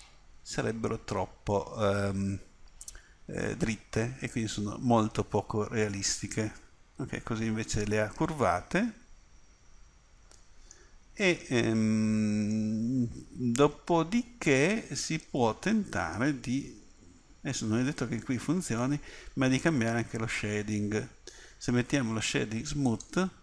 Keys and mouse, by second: 1.6 middle click, 3.5 middle click, 4.2 middle click, 7.1 middle click, 9.1-11.0 middle drag, 22.8-23.4 drag.